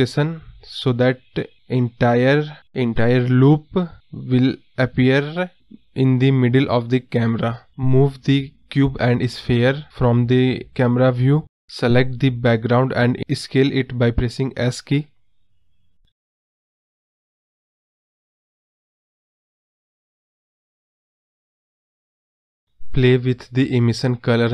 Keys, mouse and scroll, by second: 7.5 shift+click, 8.3 g, 9.9 click, 11.4 s, 13.8-14.4 scroll down 1, 14.4 scroll up 1, 14.6 scroll down 1, 14.8-15.7 scroll up 1, 15.7 click, 16.2 space, 20.3 space, 22.6 ctrl+z, 23.1-24.5 drag.